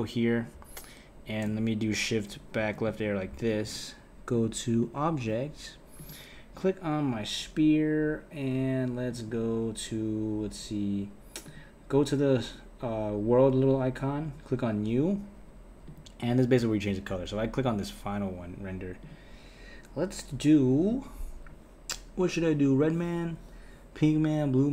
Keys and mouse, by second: 0.0-2.3 drag, 2.3 Left, 3.4 click, 4.3-6.0 drag, 9.1 click, 11.4 click, 14.2-15.9 drag, 17.9 click, 19.0 click.